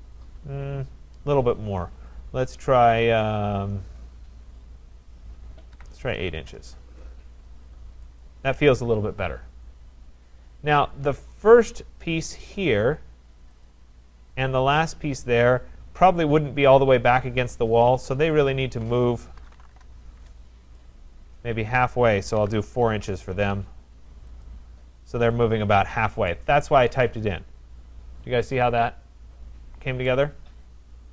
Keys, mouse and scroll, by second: 5.8 8, 6.3 shift+', 6.4 Return, 8.2 click, 11.0 click, 12.6 click, 13.7 click, 14.9 click, 18.5 shift+click, 19.2-20.1 typing, 20.8 click, 22.2-23.8 typing, 23.8 Return, 24.4 click, 25.5 click, 30.1 right click, 30.6 scroll.